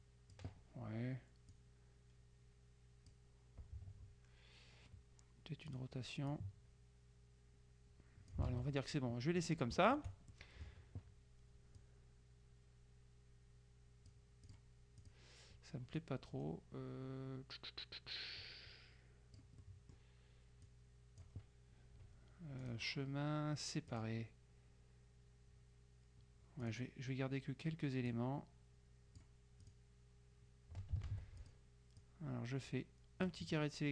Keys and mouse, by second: 1.6-3.7 drag, 5.8 click, 8.5 ctrl+click, 8.6 ctrl+z, 10.0 shift+click, 11.9-15.1 drag, 16.1-20.0 drag, 20.8 click, 22.7 click, 24.0 click, 26.7 click, 28.2-29.8 drag, 31.2 ctrl+z, 31.5-33.8 ctrl+drag, 33.8-33.9 middle drag.